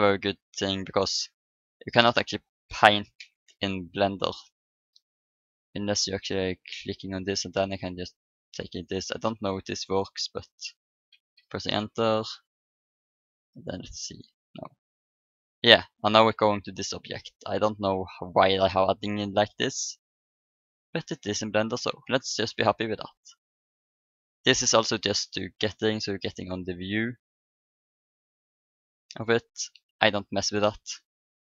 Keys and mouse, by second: 0.7-3.1 middle drag, 5.9-8.9 drag, 9.1-11.1 middle drag, 11.7 Return, 11.9 Return, 13.0-15.4 drag, 14.0 middle click, 14.0 right click, 15.4-18.6 right drag, 17.9-19.7 drag, 20.9-22.7 drag, 23.9-30.7 drag, 31.3-31.4 drag.